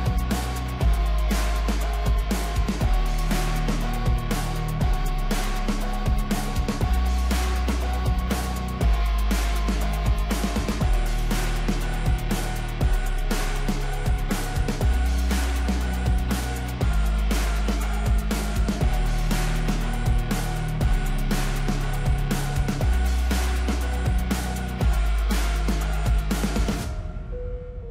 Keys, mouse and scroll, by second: 3.0-6.1 drag, 9.9-13.0 middle drag, 15.2 click, 18.0 click, 20.5-23.2 drag, 23.2-23.7 scroll up 2, 23.7-26.9 shift+middle drag, 26.9 click.